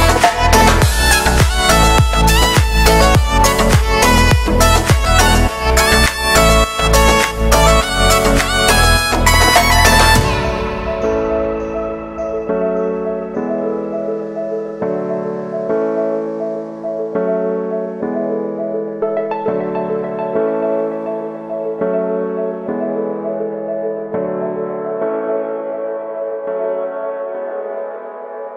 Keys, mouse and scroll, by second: 0.0-0.8 typing, 0.5 right click, 1.1 ctrl+z, 1.2 ctrl+z, 1.4 middle click, 1.5-1.9 scroll up 2, 1.9 right click, 2.4 f, 2.5 f, 2.6 f, 3.0 middle click, 3.1 scroll down 3, 3.3 shift+middle click, 3.8 l, 4.5-4.8 scroll down 1, 4.8 KP_3, 5.1 scroll up 3, 5.4 z, 5.8 shift+middle click, 6.6 g, 8.8 scroll down 9, 9.1 shift+middle click, 9.4 scroll up 1, 9.5 z, 9.7 shift+middle click, 10.1 scroll down 1, 10.2 shift+middle click, 10.4 scroll up 1, 10.6 Tab, 11.7 Tab, 12.0 middle click, 12.5-13.7 scroll up 3, 12.8 shift+middle click, 13.7 click, 14.0 right click, 14.5 shift+d, 15.0 e, 15.5-16.7 shift+middle drag, 16.7 scroll up 1, 16.9 right click, 17.3 g, 21.1 shift+middle click, 21.5 scroll up 1, 21.5 s, 26.0 shift+middle click, 26.9 scroll up 1, 27.1 w, 28.4 click.